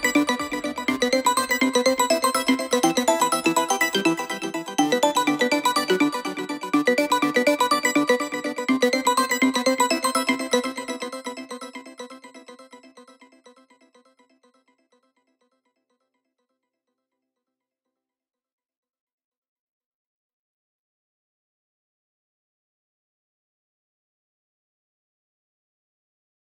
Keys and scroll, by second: 7.9 1, 7.9 ., 8.0 Return.